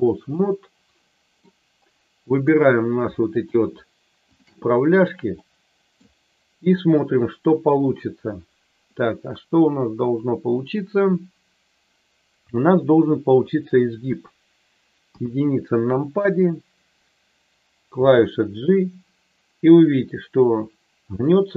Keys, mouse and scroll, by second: 0.4-1.4 middle drag, 2.3 click, 3.4 shift+click, 4.3 shift+click, 5.4 middle click, 14.0 KP_3, 15.0 KP_1, 18.0 g.